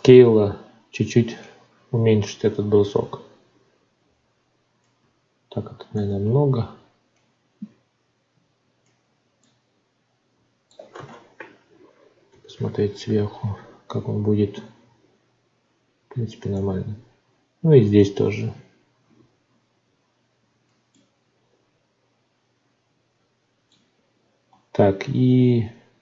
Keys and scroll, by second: 5.9 ctrl+z, 24.5 Tab.